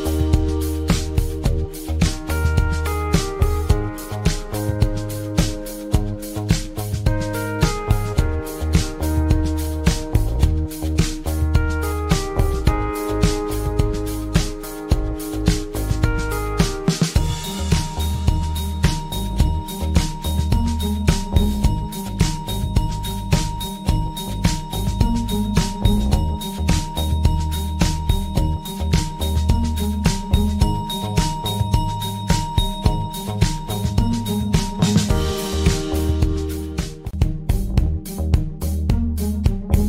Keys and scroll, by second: 38.5 Delete.